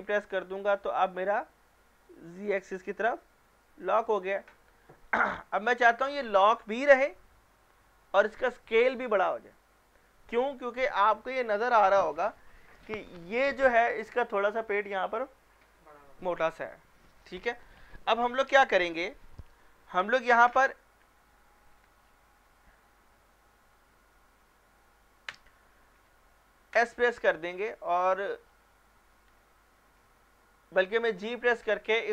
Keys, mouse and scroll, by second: 5.1-6.9 scroll down 1, 21.8-22.4 scroll down 2, 21.9 Escape, 22.4 scroll up 1, 24.1 g, 25.3 z, 26.8 s, 28.0 Escape, 28.5-29.3 scroll down 1, 29.3 g, 29.9 z.